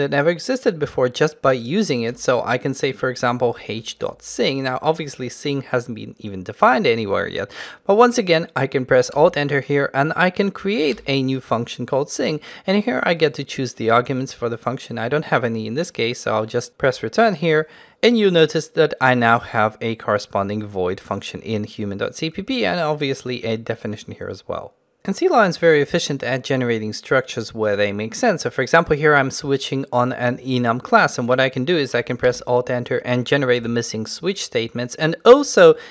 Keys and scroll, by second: 9.2 alt+Return, 32.3 alt+Return.